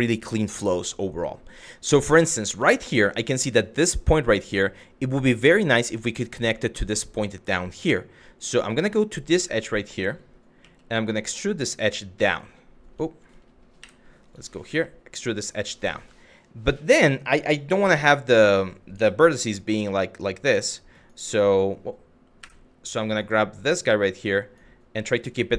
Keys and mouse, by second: 2.3 shift+middle click, 4.1 shift+middle click, 9.0 w, 10.2 e, 11.9 right click, 11.9 click, 14.3 e, 15.3 click, 17.5 q, 18.6 1, 19.3 click, 22.6 click, 23.2 click, 24.0 click.